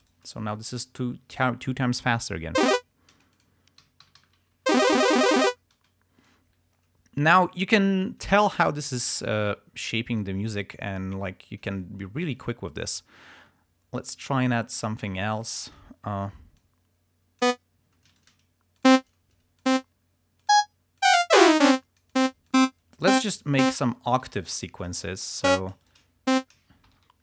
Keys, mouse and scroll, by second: 0.2 shift+right click, 0.9 click, 2.8 space, 3.5 click, 4.0 alt+d, 4.9 ctrl+alt+space, 5.7 ctrl+scroll down 2, 5.9 ctrl+space, 7.0 ctrl+scroll up 2, 9.3 ctrl+scroll down 2, 11.9-12.3 ctrl+scroll up 2, 13.6 d, 14.5 click, 15.4 ctrl+scroll up 2, 16.8 click, 17.6 click, 18.2 shift+right click, 19.0 click, 19.7 click, 20.5 click, 21.1-22.5 drag, 22.6 click, 23.1 click, 23.7 click, 24.6 alt+shift+Up, 25.5 click, 26.0 shift+right click, 26.4 shift+click, 27.0 alt+shift+Up.